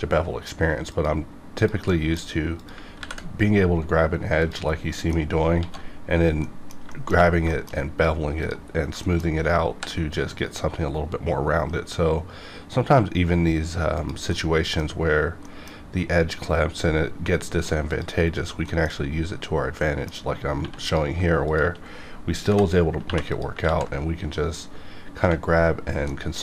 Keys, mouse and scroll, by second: 0.9 click, 1.9 middle click, 2.6 click, 3.0 ctrl+b, 4.4 click, 4.7 scroll down 1, 4.9 middle click, 5.6 alt+x, 6.4 middle click, 6.6 middle click, 6.9 shift+middle click, 7.2 scroll down 1, 7.5 shift+middle click, 8.4 click, 8.7-9.2 scroll up 2, 9.0 shift+middle click, 9.7 ctrl+b, 14.3 middle click, 14.5 scroll up 1, 15.4 middle click, 15.7 scroll up 1, 17.9 click, 18.4 scroll down 1, 18.7 shift+middle click, 20.6 1, 20.8 click, 21.5 shift+click, 22.5 j, 23.0 j, 23.3 click, 23.6 ctrl+x, 24.8 scroll down 1, 25.6-26.1 scroll down 1, 26.1 middle click.